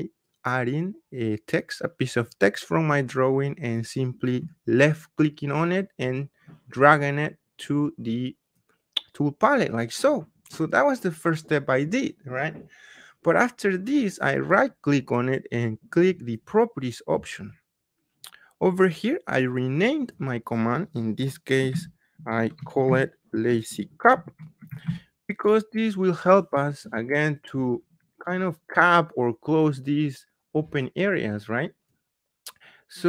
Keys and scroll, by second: 21.6 Caps_Lock, 21.7 typing, 23.2-25.2 typing, 26.3 typing.